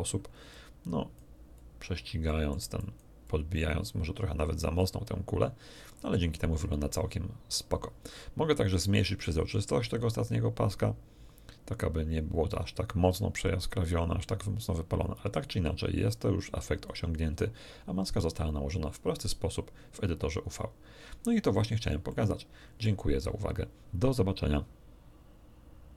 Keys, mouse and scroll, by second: 0.5 click, 1.5 click, 2.2 middle click, 2.8 click, 3.2-7.8 drag, 8.9-13.0 drag, 13.3-17.0 drag, 20.4 scroll up 1, 21.5 scroll up 2, 22.0 middle click.